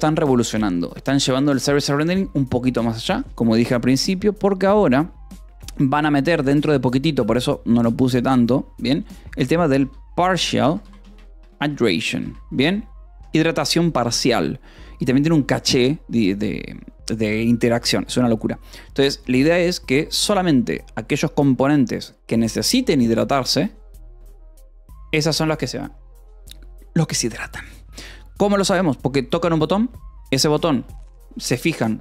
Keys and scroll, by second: 9.6-14.0 typing, 13.1 ctrl+s.